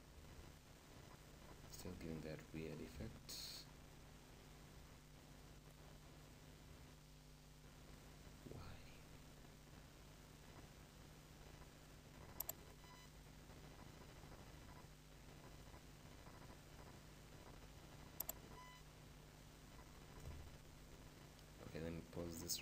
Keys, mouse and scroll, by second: 1.3-1.9 scroll up 1, 1.9 scroll up 1, 2.0-5.9 middle drag, 2.9 shift+Insert, 5.9-7.7 shift+right drag, 19.6-20.4 scroll up 1, 20.4 scroll up 1, 20.6-22.6 middle drag.